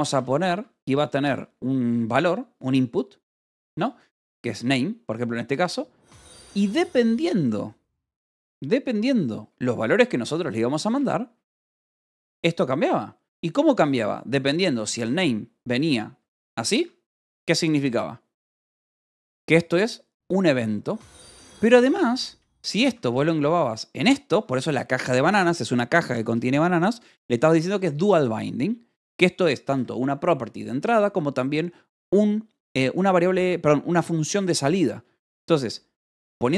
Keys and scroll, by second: 0.0-0.5 typing, 4.2-5.5 typing, 7.0 =, 10.0-16.6 typing, 16.7 Escape, 18.7-19.6 typing, 21.6-24.7 typing, 24.3 Escape, 26.0-27.8 typing, 29.5 v, 30.2 e, 30.7 Escape.